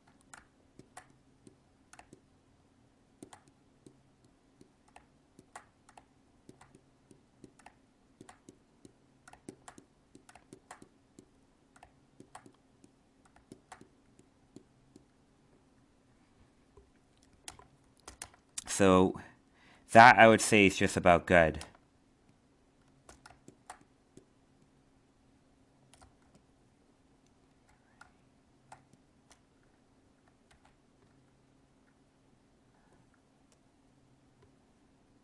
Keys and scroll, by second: 26.2 alt+space, 30.4 ctrl+z.